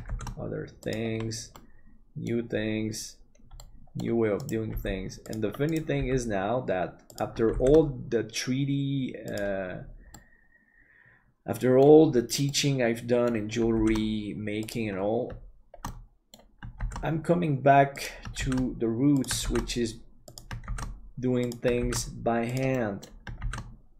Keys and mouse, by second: 1.6 middle click, 3.7 middle click, 4.7 g, 6.0 g, 7.5 shift+d, 10.1-12.0 middle drag, 12.5 middle click, 13.7 shift+d, 15.9 middle click, 19.5 shift+d, 22.8 middle click.